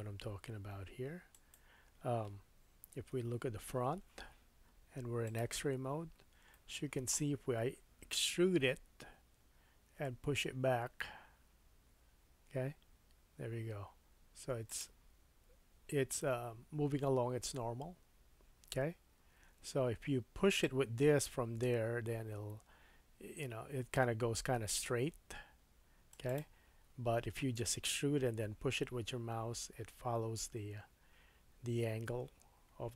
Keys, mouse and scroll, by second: 1.2-7.1 drag, 3.2 KP_1, 5.9-6.4 scroll up 4, 6.6 shift+middle click, 8.6 e, 12.7-14.8 drag, 14.8-20.6 middle drag, 20.6-26.3 drag, 26.3-32.9 middle drag.